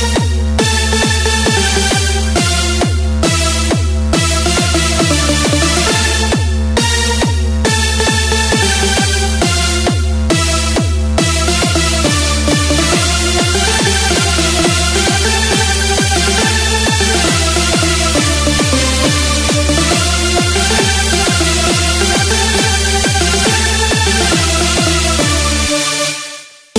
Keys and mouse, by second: 1.1-5.1 drag, 9.6-12.3 drag, 20.9-26.4 drag.